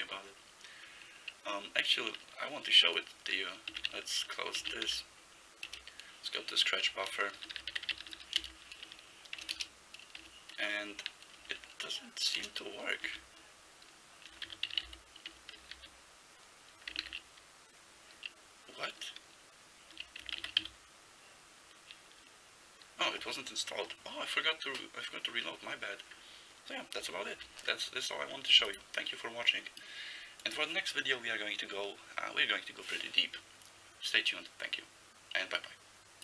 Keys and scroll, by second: 3.7 ctrl+x, 3.9 ctrl+s, 4.6 ctrl+x, 4.9 k, 5.7 Return, 6.9-8.7 typing, 9.6 Return, 10.2 Return, 11.5 typing, 13.1 alt+x, 14.3-16.3 typing, 17.1 ctrl+g, 20.5 ctrl+c, 20.6 r.